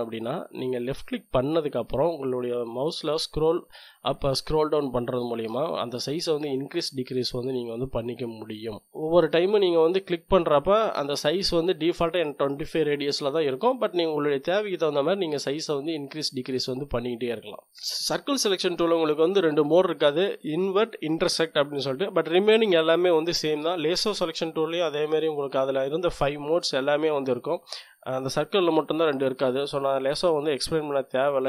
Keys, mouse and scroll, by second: 0.8-2.2 drag, 2.2-2.8 scroll down 1, 2.8-3.3 scroll down 1, 3.3 scroll down 1, 4.1-4.6 scroll down 1, 4.7-5.6 scroll up 1, 8.7 middle click, 9.0 click, 9.4 middle click, 10.1-13.3 drag, 13.3-14.1 scroll down 1, 14.2 scroll down 1, 15.2-15.8 scroll down 2, 24.2-25.8 drag.